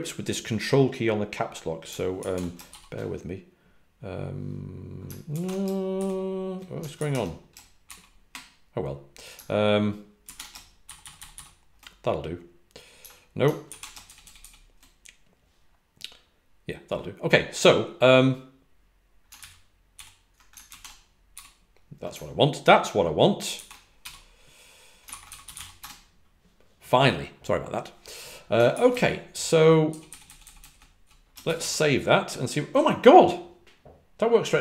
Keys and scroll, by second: 5.9 shift+j, 10.9-11.3 typing, 14.3 typing, 19.9 ctrl+d, 25.2-26.2 typing, 30.2-30.5 typing, 31.6 typing.